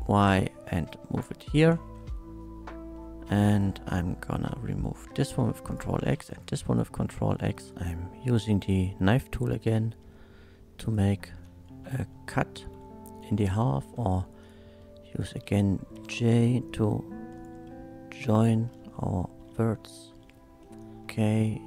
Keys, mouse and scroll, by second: 1.4 ctrl+click, 2.1 ctrl+middle click, 2.9 ctrl+middle click, 3.3 1, 3.5 click, 3.9 middle click, 5.1 ctrl+x, 5.7 ctrl+click, 6.1 ctrl+x, 7.4 2, 7.6 click, 7.7 Tab, 7.7 k, 8.6 click, 10.0 z, 10.8 click, 11.4 space, 11.9 middle drag, 13.1 click, 13.3 Tab, 13.9 Tab, 14.1 1, 14.4 click, 15.1 shift+click, 15.9 j, 16.6 click, 17.3 shift+click, 18.2 j, 18.8 middle click, 19.8 k, 20.8 click, 21.2 z, 21.2 k.